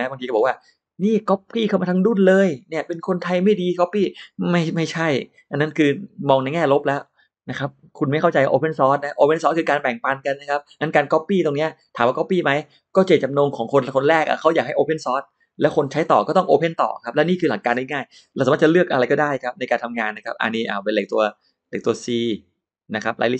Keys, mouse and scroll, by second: 18.9 click, 21.1 click, 22.1 click.